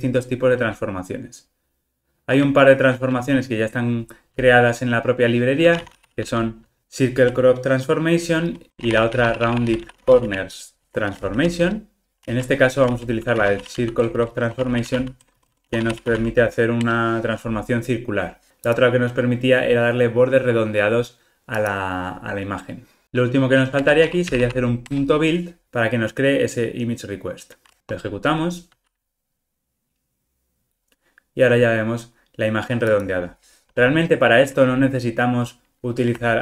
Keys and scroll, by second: 11.7 Return, 12.2 super+z, 12.8 super+z, 16.8 Return, 23.0 alt+super+l, 24.8 Return, 27.9 ctrl+r.